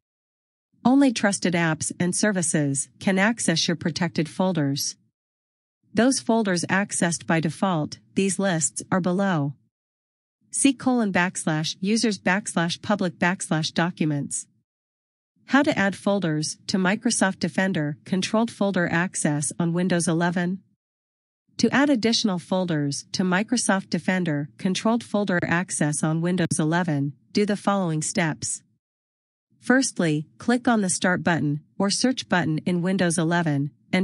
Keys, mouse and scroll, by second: 18.0 scroll down 1, 24.3 click, 26.5-27.9 typing, 33.0 click.